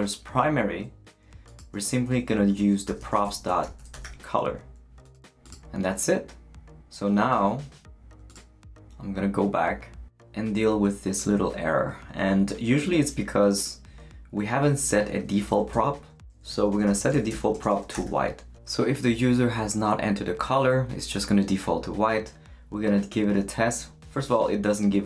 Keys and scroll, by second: 2.3-4.5 typing, 15.7 Return, 16.3-18.5 typing.